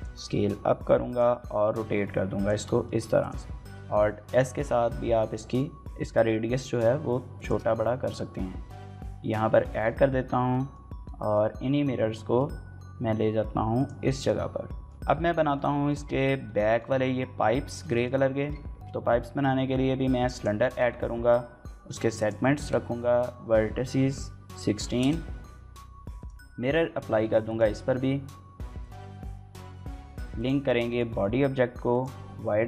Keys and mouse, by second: 0.5-3.4 typing, 0.7 click, 1.2 click, 1.7 click, 2.7 click, 3.2 click, 3.6 alt+s, 7.1 shift+click, 7.8 Tab, 8.4-8.8 middle drag, 9.4 shift+middle drag, 9.6-10.5 middle drag, 10.8 middle click, 11.3 y, 11.6 x, 12.3 click, 12.4 shift+middle click, 12.5 middle click, 13.8 shift+middle click, 14.2 shift+middle click, 14.4 middle click, 14.7 shift+middle click, 15.2 shift+middle click, 15.5 middle click, 16.5 shift+middle click, 17.5 shift+middle click, 17.7 middle click, 18.5 shift+a, 20.4 shift+middle click, 22.0-25.2 drag, 26.1-27.4 drag, 30.7 shift+middle click, 30.9 middle click, 31.7-32.6 drag.